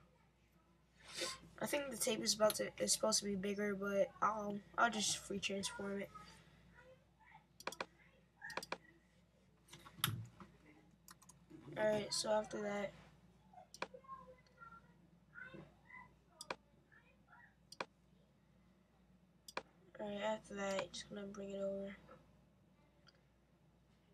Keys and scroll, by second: 11.1 super+t.